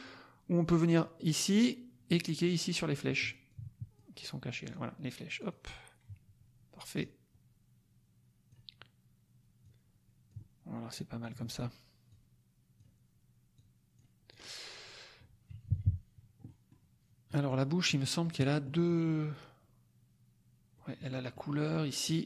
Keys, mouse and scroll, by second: 3.4 click, 4.7 click, 5.3 click, 6.9-8.6 drag, 9.6 click, 10.9 click, 12.0 click, 13.5 click, 14.4 click, 15.5 KP_Subtract, 16.4 middle click, 16.6 click, 17.2-18.3 middle drag, 18.4 middle click, 18.8 click, 20.7-22.2 drag.